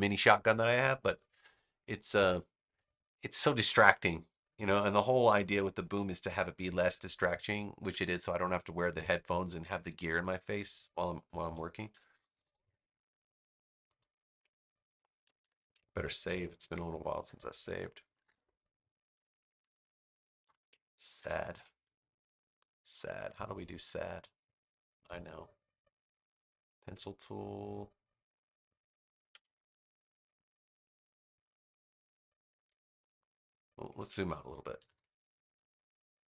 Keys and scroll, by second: 11.6 super+=, 15.3 super+=, 16.2 super+s, 19.4 space, 21.1 super+=, 22.0 space, 33.9 super+z, 34.7 super+-.